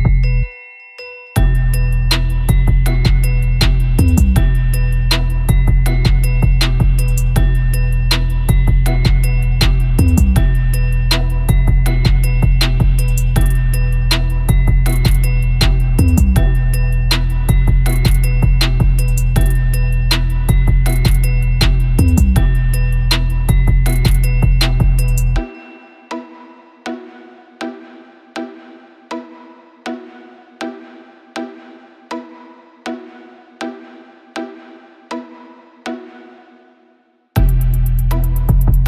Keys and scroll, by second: 0.8 space, 2.1-4.4 typing, 2.5 super+z, 4.4 super+z, 5.1 super+z, 5.9-9.3 typing, 6.1 super+z, 6.5 super+z, 7.4 super+z, 10.4 Return, 10.5 super+-, 10.6 super+-, 11.3 super+d, 11.3 super+-, 11.4 super+-, 11.5 super+=, 11.5 super+;, 11.7 super+;, 14.1 super+t, 16.6 super+=, 16.7 super+=, 17.2 super+-, 17.8 super+l, 18.9 super+l, 19.6 ], 19.7 Return, 19.8 super+=, 20.1 space, 25.2 super+z, 25.4 super+z, 31.6 space, 32.8 space, 33.4 \, 33.6 Return, 34.3 super+z, 35.8 super+t.